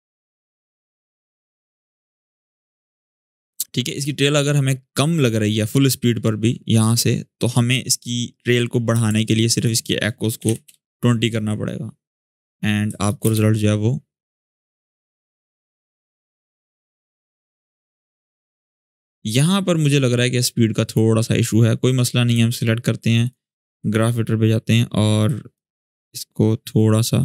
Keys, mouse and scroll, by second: 3.2-7.6 drag, 9.9-10.7 typing, 12.4-12.8 click, 13.0 space, 18.5-20.7 drag, 23.6-24.6 alt+scroll up 2, 24.6-25.0 alt+scroll up 1, 25.0-27.2 drag, 27.1-27.2 drag.